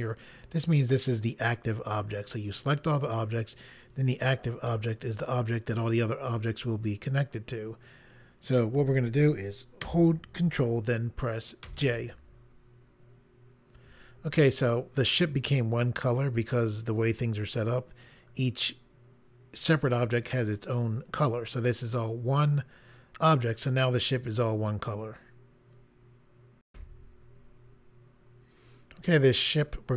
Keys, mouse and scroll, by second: 11.7 ctrl+j, 26.7 Pause.